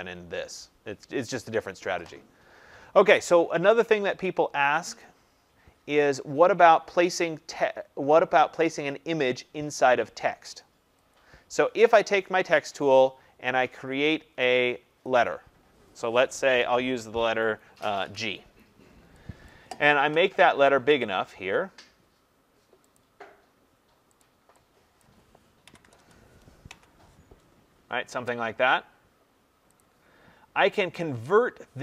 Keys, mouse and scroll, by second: 4.9 click, 11.1 click, 15.0 click, 17.9 g, 19.4 click, 20.9 click, 22.9 click, 24.9 click, 25.6 typing, 26.6 Tab, 29.7 click.